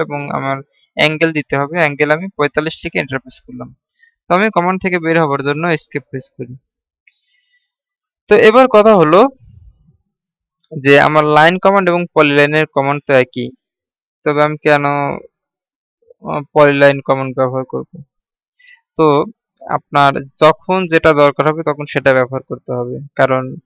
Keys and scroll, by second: 6.9 Escape.